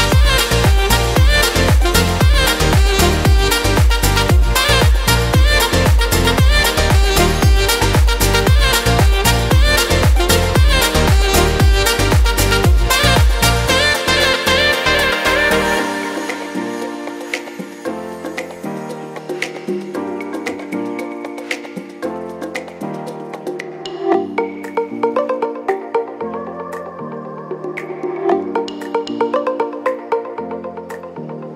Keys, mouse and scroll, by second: 23.3 F4.